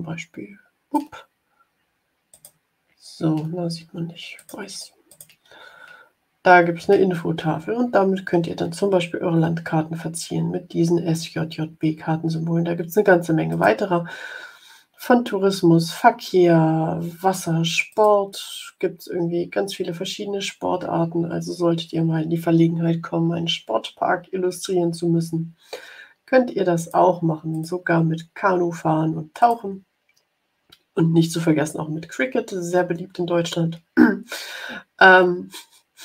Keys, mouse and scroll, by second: 2.2 click, 4.3 click, 5.2 click, 13.4 click, 17.8 click, 19.2-21.0 scroll down 5, 21.4 scroll up 2, 24.3-25.4 scroll up 4, 26.7 click, 27.4 click, 29.3 click.